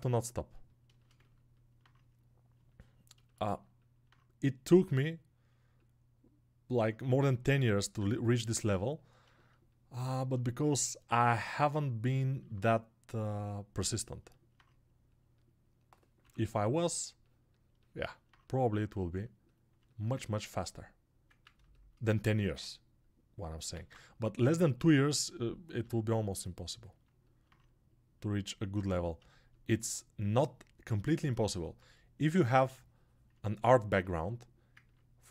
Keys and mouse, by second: 1.0-3.6 ctrl+alt+right drag, 3.6-12.4 alt+drag, 19.2-33.9 shift+drag, 33.9-35.3 alt+shift+right drag.